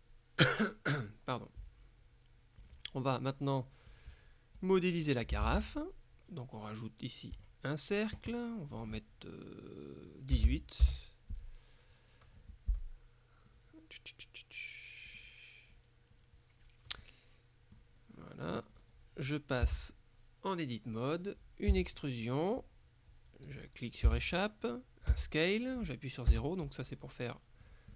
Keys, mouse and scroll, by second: 1.7-3.2 drag, 4.0-5.2 drag, 5.5 shift+a, 7.4 click, 8.8 click, 10.4 KP_1, 10.5 KP_8, 10.9 KP_Enter, 13.6 middle click, 15.3-16.8 middle drag, 17.0 middle click, 19.7 Tab, 21.8 e, 24.1 Escape, 25.2 s, 26.4 KP_0, 27.7 click.